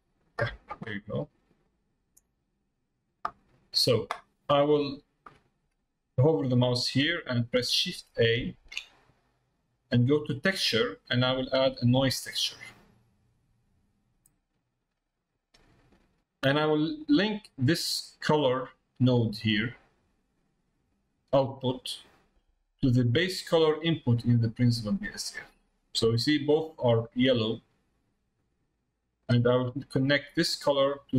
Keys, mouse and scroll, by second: 1.7-4.4 drag, 4.4 middle click, 6.3 middle click, 19.3-26.1 drag, 29.2-31.1 drag.